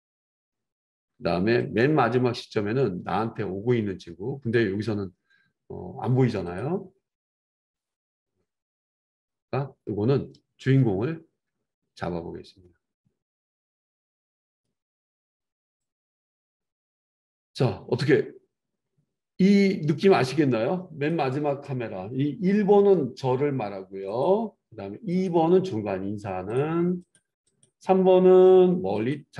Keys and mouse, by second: 27.1 middle click, 27.6-29.3 drag.